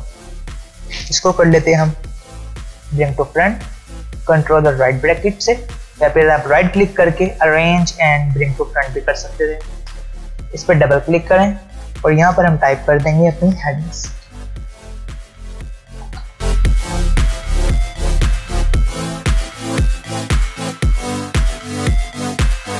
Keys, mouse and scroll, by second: 2.3 ctrl+], 6.2 right click, 7.3 click, 10.5 click, 15.4 b, 16.8 click, 17.2 Return, 17.5 click, 17.6 click, 18.0 scroll down 1, 18.1-18.5 click, 18.8 click, 19.1 Return, 19.5 click, 20.0 alt+scroll up 1, 20.2-20.5 click, 21.4 click.